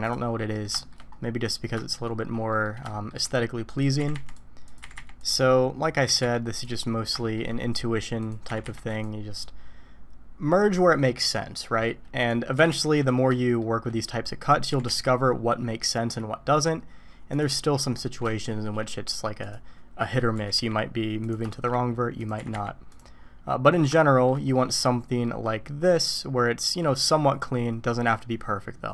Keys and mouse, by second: 0.5 middle click, 0.8 shift+middle click, 1.8 shift+middle click, 2.5 middle click, 2.9 shift+middle click, 4.0 g, 4.8 g, 6.0 g, 7.2 shift+middle click, 8.2 click, 8.4 g, 12.2 click, 12.5 g, 13.3 shift+middle click, 14.7 g, 18.3 shift+middle click, 19.4 click, 20.3 g, 21.5 shift+middle click, 22.2 click, 22.4 g, 23.3 middle click, 24.8 click, 26.8 click.